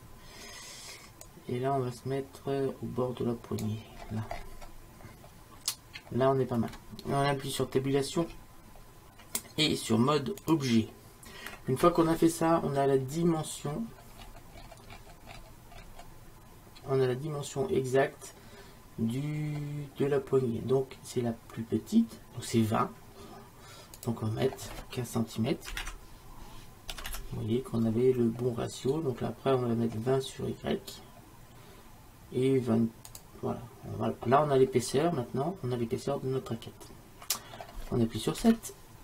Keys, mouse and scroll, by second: 1.3 right click, 4.1-8.3 middle drag, 8.3 Tab, 13.1-24.0 middle drag, 24.0-30.0 drag, 34.6-37.0 middle drag, 38.5 KP_7.